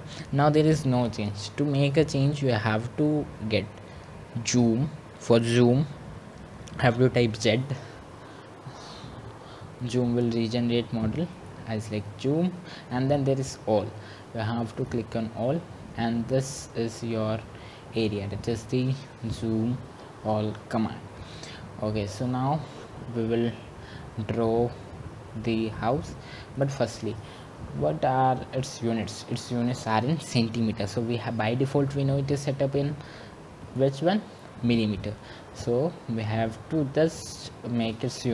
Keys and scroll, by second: 4.9 Return.